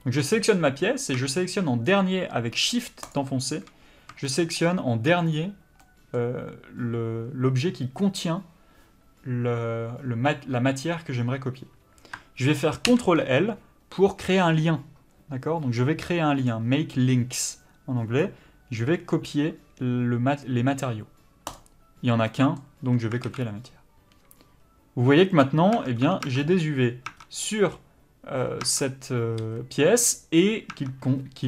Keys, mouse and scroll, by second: 4.2 shift+middle click, 22.3 middle click, 23.3 alt+a, 23.6-25.4 scroll up 1, 25.4 click, 25.7 Tab, 26.4 middle click, 27.1 Tab, 27.1 scroll up 1, 27.2 Tab, 27.4 middle click, 28.6 Tab, 29.4 a, 30.7 Tab.